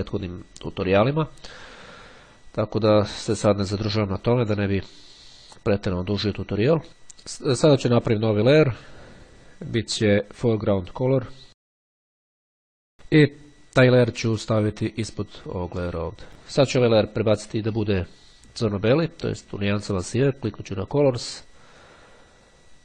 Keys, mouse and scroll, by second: 8.7 click, 10.5 click, 12.2 click, 14.9 click, 16.3 click, 20.3-21.4 drag, 22.5 click.